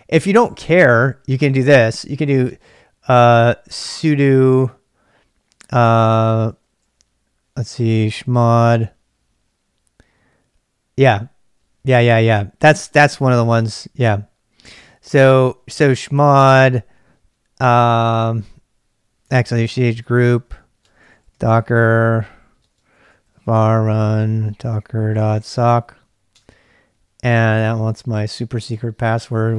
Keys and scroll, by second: 0.0-2.9 typing, 5.6-6.3 typing, 7.7-8.8 typing, 15.8 d, 18.0 typing, 19.3-26.8 typing, 28.4-29.2 typing.